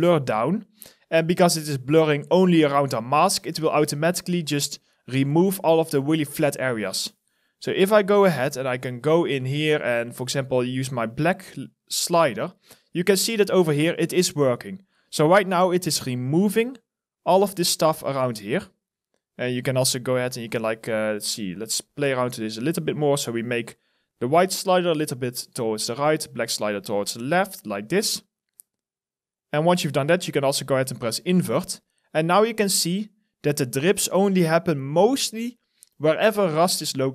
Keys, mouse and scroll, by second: 14.8 alt+middle click, 15.1 alt+right click, 15.5 alt+click, 32.3 alt+middle click, 32.7 alt+right click, 33.1 alt+click, 34.2 alt+middle click, 34.5 alt+click, 36.0 alt+middle click, 36.4 alt+right click, 36.8 alt+click.